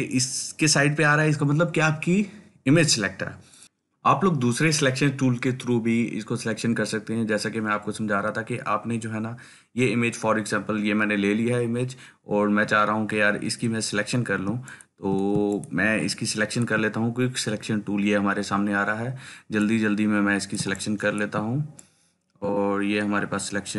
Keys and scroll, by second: 14.7 ctrl+space, 15.1 ctrl+space, 15.2 ctrl+space, 15.3 ctrl+space.